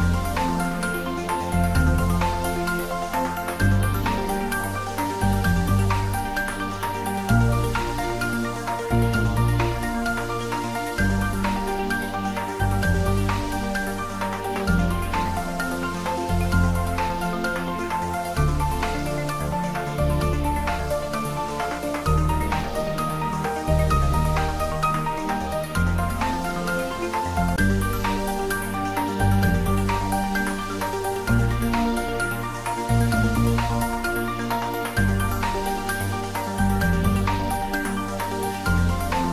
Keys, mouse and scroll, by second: 1.6 click, 3.8 ctrl+r, 4.6 click, 6.3 Tab, 8.4 ctrl+r, 9.0 click, 11.8 Tab, 13.5 ctrl+z, 16.3 ctrl+r, 17.1 click, 20.0 click, 20.7 Tab, 22.6 ctrl+middle click, 23.6 middle click, 24.5 ctrl+r, 25.5 click, 27.8 ctrl+r, 28.3 click, 31.8 Tab, 32.3 scroll up 1, 33.5 scroll down 1, 34.0-36.3 middle drag, 36.3-36.7 scroll down 1, 36.7-38.6 middle drag, 38.6 shift+right click.